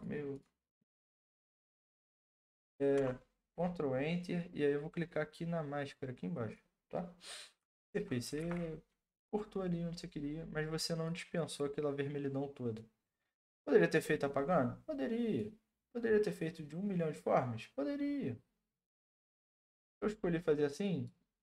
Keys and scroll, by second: 3.0 ctrl+Return, 8.4 ctrl+t.